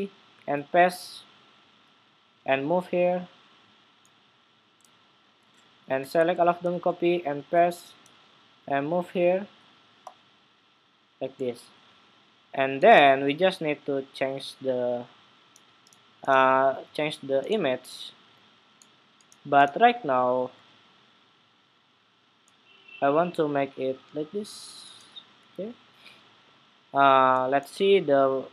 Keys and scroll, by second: 0.2 super+v, 6.4 super+c, 7.2 super+v.